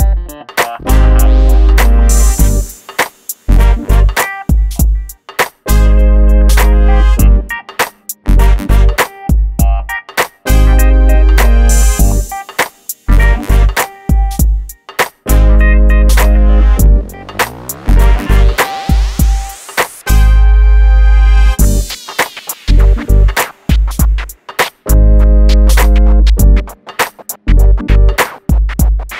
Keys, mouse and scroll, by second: 0.4-0.7 scroll up 1, 1.3 m, 2.2 click, 4.8 shift+click, 5.2-5.6 scroll down 1, 5.8 scroll up 1, 6.0 click, 6.4 scroll up 1, 6.5 scroll down 1, 7.4 click, 7.8-11.2 middle drag, 11.2 e, 11.3 click, 11.9-12.8 scroll down 1, 12.8 click, 13.3 middle click, 14.5 click, 16.0 Delete, 17.0 middle click, 18.0 click, 18.5-18.8 scroll up 1, 19.8 scroll down 1, 20.5 click, 21.8 m, 22.1 click, 27.1 F3.